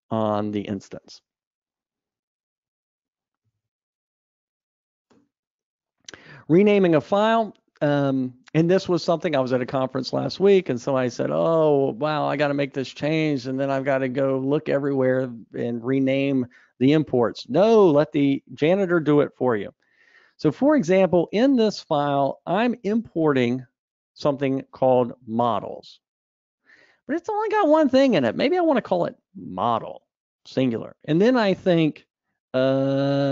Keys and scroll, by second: 2.7 alt+Up, 4.0 super+Up.